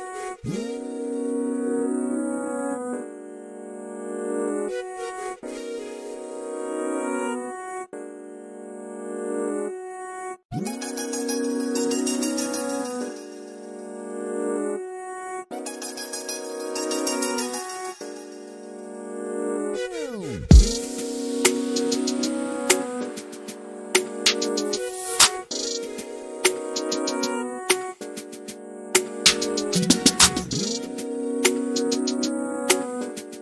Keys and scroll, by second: 0.0-0.3 typing, 3.9-5.6 typing, 15.1 m, 16.7-18.3 typing, 20.9-22.4 typing, 26.5-27.2 typing, 28.4 p, 32.5-33.2 typing.